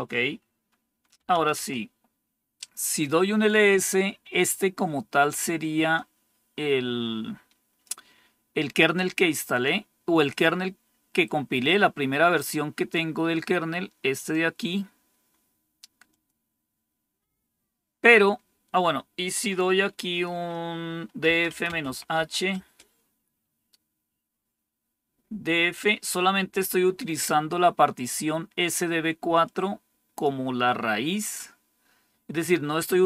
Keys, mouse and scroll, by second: 0.8-1.7 typing, 5.8-7.8 drag, 9.4 click, 11.6-14.3 drag, 16.0 click, 20.9-22.6 typing, 29.3 click.